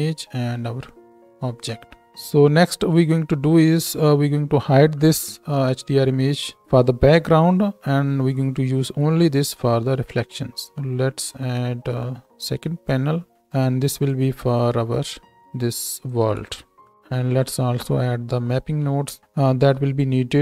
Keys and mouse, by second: 13.6-14.1 middle drag, 14.1-16.1 drag, 16.8 shift+e, 18.6 ctrl+t, 19.6 shift+e.